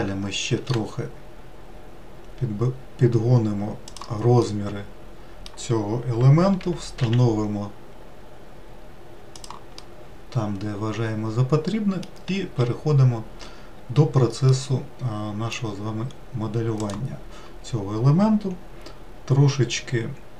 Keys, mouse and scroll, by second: 0.3 s, 4.1-6.3 middle drag, 6.3 g, 9.5-12.3 middle drag, 12.3 3, 13.4 scroll up 1, 14.2-15.8 middle drag, 15.8-16.5 scroll up 1, 16.5 click, 20.1 e.